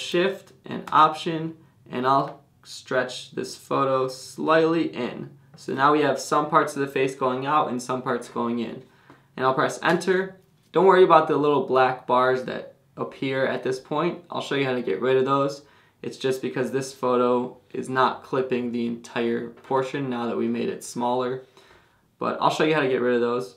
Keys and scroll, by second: 9.9 Return.